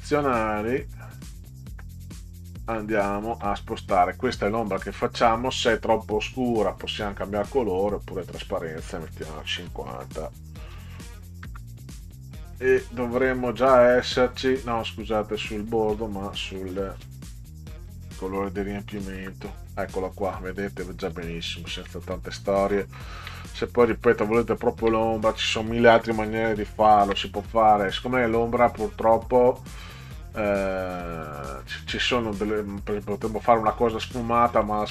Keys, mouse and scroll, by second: 1.2 middle click, 2.6 Right, 3.3 Down, 6.9 click, 8.2 click, 9.6 5, 10.6 0, 11.4 Return, 15.5 click, 16.6 click, 17.7 5, 18.9 0, 19.2 Return, 20.4 click, 21.1 ctrl+click, 21.2 ctrl+Down, 21.6 ctrl+Down, 23.0 ctrl+scroll up 2, 23.9 middle click, 24.6 ctrl+scroll up 2, 32.5 click.